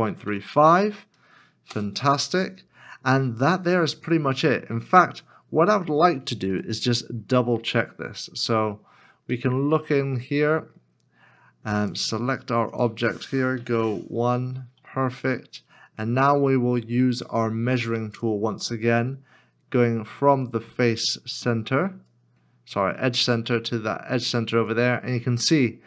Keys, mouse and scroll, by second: 0.0-0.5 typing, 1.7 Return, 6.5 KP_1, 8.8 scroll up 1, 9.6 shift+middle click, 10.2 middle click, 10.9 scroll down 1, 13.5 KP_Decimal, 14.2 KP_Decimal, 14.4 scroll down 1, 15.7 middle click, 20.5 ctrl+click.